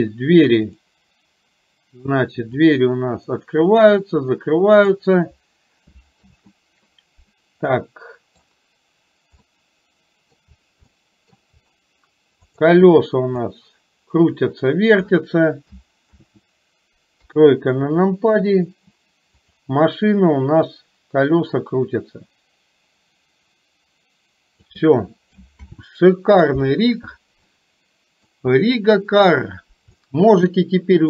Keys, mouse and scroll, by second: 2.6-5.1 drag, 7.7-8.6 middle drag, 9.6-10.5 middle drag, 11.0 middle click, 13.5-15.2 drag, 17.2 KP_3, 20.8-24.7 drag, 25.7 ctrl+z, 27.6-28.3 middle drag, 30.1-31.0 shift+middle drag.